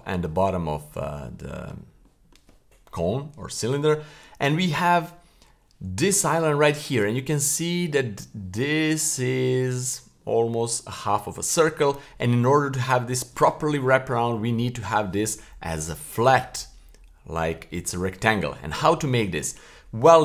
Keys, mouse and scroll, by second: 0.5-1.0 middle drag, 1.3-1.6 middle drag, 2.0 middle click, 3.8-5.1 scroll down 1, 6.0 l, 19.9-20.2 scroll up 1.